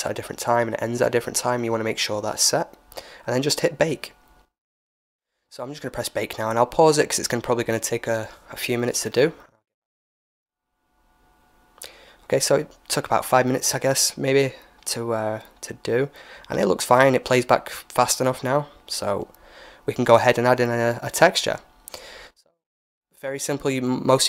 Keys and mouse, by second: 4.3-9.5 drag, 12.0-14.0 drag, 15.3 alt+a, 15.3-17.1 drag, 16.7 ctrl+s, 19.1-21.7 drag, 21.7-23.9 middle drag, 23.9-24.2 drag.